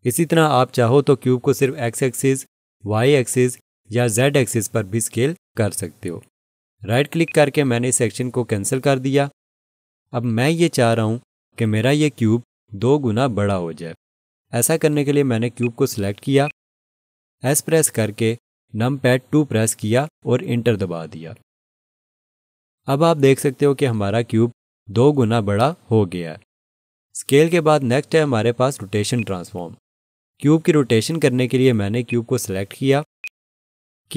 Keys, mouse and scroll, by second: 1.6 right click, 2.7 x, 4.2 right click, 4.9 z, 7.3 right click, 15.6 click, 19.9 2, 20.9 Return, 28.6 ctrl+z, 29.2 click, 33.2 click.